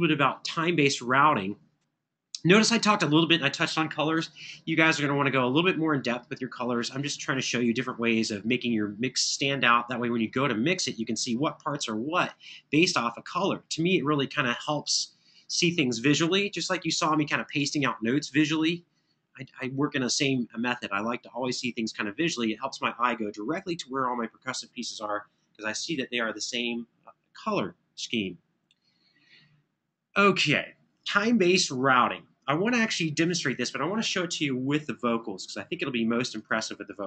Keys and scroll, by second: 16.9 super+=, 18.9 super+=.